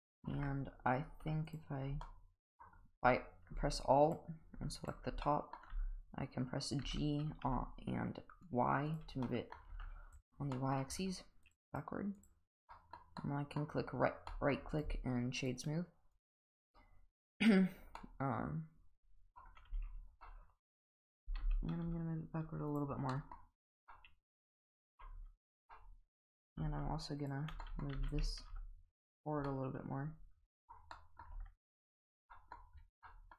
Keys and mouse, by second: 0.3 Tab, 2.0 middle click, 5.2 middle click, 5.7 g, 9.2 middle click, 9.7 Tab, 10.1 click, 10.5 middle drag, 11.4 click, 11.7 right click, 12.7 middle drag, 13.2-13.5 middle drag, 14.3 middle drag, 15.6 right click, 18.0-19.3 middle drag, 20.2-20.9 middle drag, 21.2 g, 23.1 middle drag, 23.9-25.0 middle drag, 25.4 Tab, 25.7-26.2 middle drag, 27.2 alt+shift+click, 27.6 middle click, 27.9 g, 29.5 middle click, 30.5 middle click, 30.9 middle drag, 31.3 Tab, 32.3 middle drag, 33.0-33.3 middle drag.